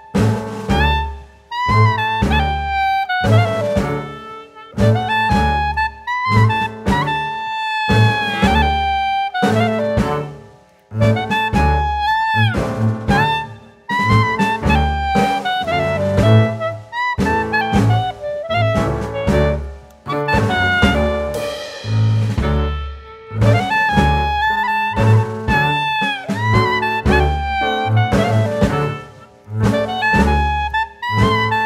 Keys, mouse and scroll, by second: 1.2 scroll down 2, 1.4-1.7 scroll up 1, 2.8 shift+a, 11.2-13.0 scroll down 3, 13.0 click, 13.4 scroll up 1, 14.6 r, 16.4 a, 17.0 click, 17.3 click, 18.3 s, 21.3 shift+middle click, 21.8 s, 21.8-22.8 scroll up 1, 22.8 click, 22.8-23.6 scroll up 2, 23.6-23.9 scroll up 3, 23.9 shift+middle click, 24.3 s, 24.7 click, 26.1 click, 29.3 click, 30.2 middle click, 30.8-31.5 scroll down 2, 31.5 click.